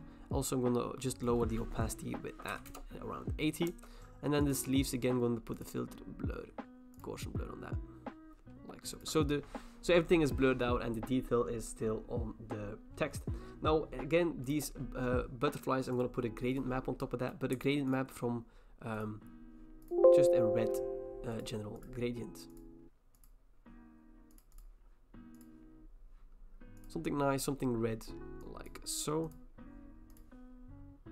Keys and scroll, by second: 2.3-3.2 typing, 3.7 Return.